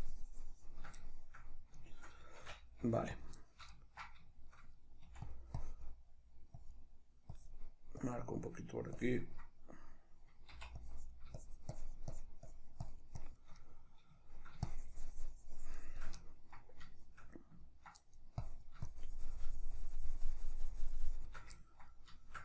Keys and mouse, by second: 1.1-3.2 shift+middle drag, 2.5 shift+c, 3.2 click, 3.4-5.4 shift+middle drag, 5.0 f, 5.6-13.7 drag, 10.5 c, 13.7-14.7 middle drag, 14.7-16.3 shift+drag, 16.3-18.5 ctrl+middle drag, 18.5-21.7 drag, 21.7-22.4 ctrl+middle drag.